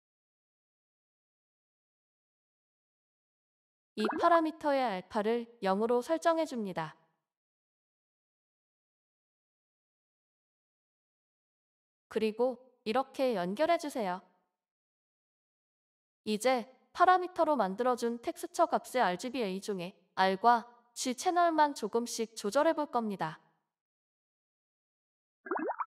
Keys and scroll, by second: 17.6-18.7 typing, 21.2 BackSpace.